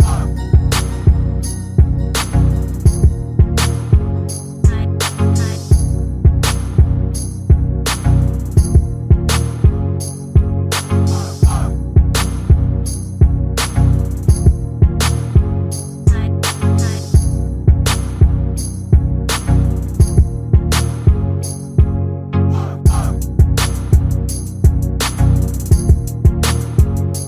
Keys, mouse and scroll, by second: 0.0-0.1 typing, 0.1 shift+click, 0.2 right click, 0.3 click, 0.5 click, 0.8 shift+click, 0.8 right click, 1.4 click, 1.5 g, 2.3 click, 2.8 shift+click, 2.9 right click, 3.0 click, 3.6 click, 3.8 shift+click, 3.8 right click, 4.0 click, 4.5 shift+click, 4.5 right click, 4.7 click, 4.8 click, 5.1 shift+click, 5.3 click, 5.4 click, 5.8-6.4 scroll down 11, 5.9 shift+middle click, 6.4 shift+middle click, 6.5-6.8 scroll up 6, 6.6 shift+middle click, 6.7 middle click, 7.3 scroll down 7, 7.4 shift+middle click, 7.6 scroll up 5, 7.8 shift+middle click, 8.0 click, 8.3-16.8 typing, 8.4 click, 8.7 shift+click, 9.0 click, 9.4 shift+click, 9.6 click, 10.0 shift+click, 10.2 shift+middle click, 11.2 shift+middle click, 13.9 click, 14.1 shift+click, 14.4 click, 14.7 shift+click, 14.9 click, 15.3 shift+click, 15.9 shift+middle click, 16.4 click, 16.6 shift+click, 17.8 click, 17.9-23.3 typing, 18.1 click, 18.3 shift+click, 18.7 click, 19.0 shift+middle click, 19.2 click, 19.5 click, 19.8 shift+click, 20.0 click, 20.3 shift+middle click, 20.4 shift+click, 21.1 click, 21.8 shift+middle click, 23.0 click, 23.4 shift+middle click, 23.8 click, 25.0 click, 25.1 g, 25.4 shift+click, 25.4 e, 25.8 s.